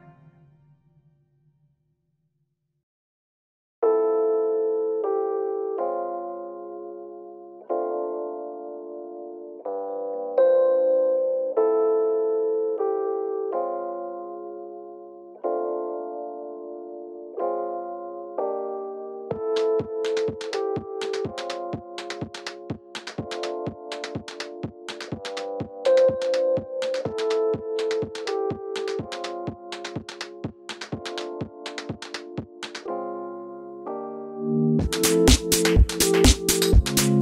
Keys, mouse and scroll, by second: 2.9 click, 3.1 alt+d, 3.4 click, 3.9 r, 4.6 click, 5.2 alt+d, 5.7 click, 6.0 r, 7.4 click, 7.9 alt+d, 8.9 click, 8.9 e, 9.9 click, 10.3 alt+d, 11.2 click, 11.3 r, 11.8 click, 12.2 s, 13.2 click, 13.6 click, 13.9-14.2 scroll up 1, 14.2 click, 14.5 s, 15.2 click, 15.3 shift+middle click, 15.9 click, 16.4 alt+d, 17.4 r, 18.1 click, 18.4 alt+d, 19.2 click, 19.3 r, 20.5 click, 21.0 alt+d, 21.8 r, 22.5 click, 22.9 alt+d, 24.1 click, 24.3 r, 25.0 click, 25.1 s, 26.3 click, 26.5 alt+d, 27.1 click, 27.2 s, 29.7-31.3 middle drag, 30.2 r, 31.3 click, 31.4 s, 32.1 click, 32.3 middle click, 32.7 alt+d, 33.1 click, 33.3 r, 34.2 click, 34.4-37.2 middle drag.